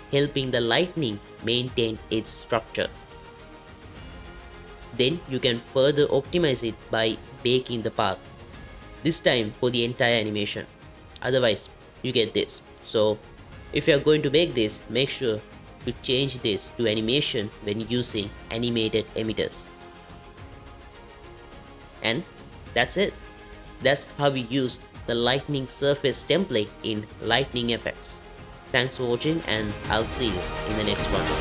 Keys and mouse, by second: 10.1 click, 10.7 drag, 13.3-17.3 drag, 19.3 click, 22.0 space, 24.2 click, 27.9 space.